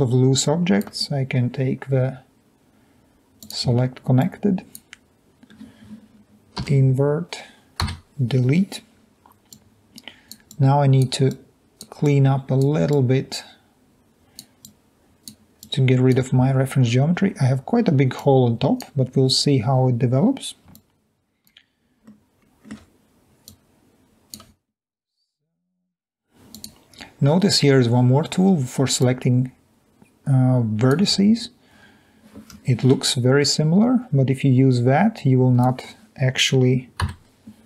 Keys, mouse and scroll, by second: 4.9-5.6 drag, 7.4 i, 8.7 Delete, 11.4-11.8 drag, 12.2-12.7 drag, 13.1-13.4 drag, 15.6-16.2 drag, 16.3-17.0 drag, 17.2-17.6 scroll up 2, 17.6-18.5 scroll down 2, 18.9-19.3 drag, 33.4 Escape, 33.8-36.3 drag.